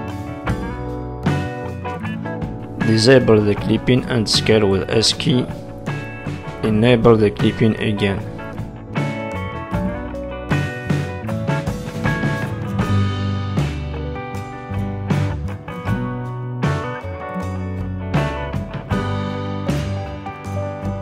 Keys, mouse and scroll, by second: 0.1-1.9 scroll down 6, 1.9-3.0 scroll down 3, 3.0 click, 4.2 click, 4.7 s, 9.0 s, 9.8 click, 10.2-10.8 scroll up 3, 11.8 r, 13.2 z, 13.8 middle click, 15.0 z, 17.4 click, 18.4 click, 20.6 s.